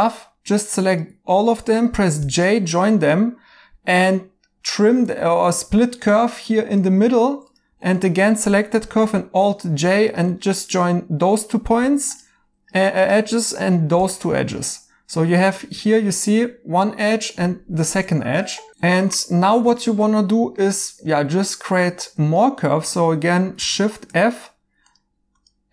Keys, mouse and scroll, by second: 3.7 j, 7.8 2, 9.0 alt+j, 12.1 j, 15.8 right click, 15.8 j, 18.0 right click, 18.9 right click.